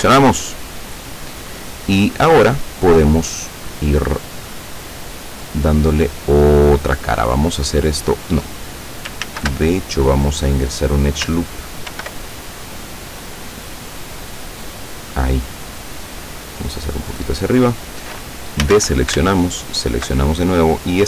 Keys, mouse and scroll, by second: 4.2-6.8 middle drag, 7.4 click, 9.3 ctrl+z, 10.5 click, 11.2-15.3 ctrl+middle drag, 12.0 ctrl+r, 15.3 click, 17.5 click, 18.7 a, 19.7 alt+shift+right click, 20.7 click.